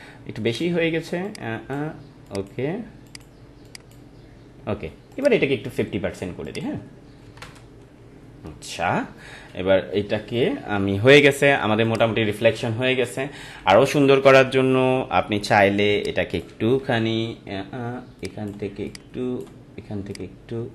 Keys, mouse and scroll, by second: 9.0 ctrl+=, 11.8 click, 12.1 ctrl+-, 12.8 ctrl+-, 14.6 ctrl+=, 15.9 space, 16.0 click, 16.3 space, 16.8 ctrl+t, 18.2-20.7 drag.